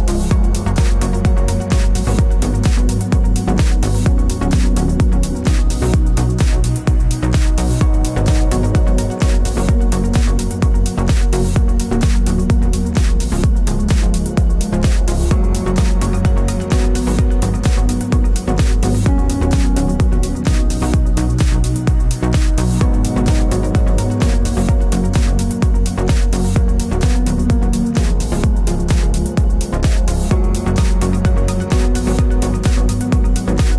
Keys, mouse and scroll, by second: 2.3 click, 3.5 click, 4.5 click, 5.8-8.4 middle drag, 8.5 click, 9.4-10.0 scroll up 4, 10.0-12.5 middle drag, 12.5-18.0 drag, 18.0-20.6 drag, 23.1 click, 25.5-28.1 drag, 28.9-33.7 drag.